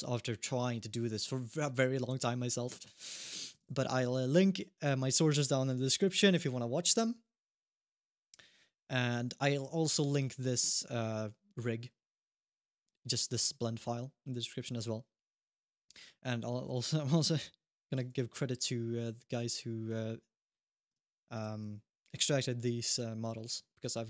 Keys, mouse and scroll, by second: 2.7 scroll down 1, 3.0 middle click, 3.4 ctrl+s, 3.9 shift+middle click, 8.8 scroll down 1, 9.2 middle click, 16.7-17.6 scroll down 1, 17.9 middle click, 18.3 shift+middle click, 18.6-19.2 scroll down 1, 19.3 middle click, 20.2 scroll up 1, 20.4 middle click, 20.7 ctrl+Tab, 21.1 click, 23.0 click.